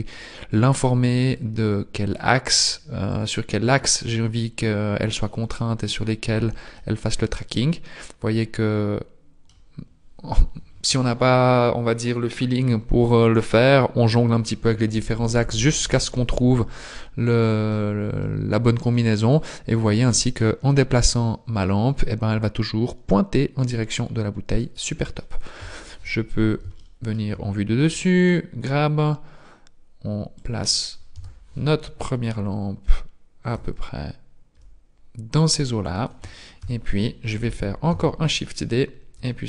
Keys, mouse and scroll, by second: 1.3 click, 3.2 click, 6.8 middle click, 17.0 middle click, 19.3 click, 25.6 KP_7, 26.8 shift+middle click, 27.8 g, 31.2 KP_1, 33.6 g, 36.6 KP_7, 37.9 shift+d, 39.2 g.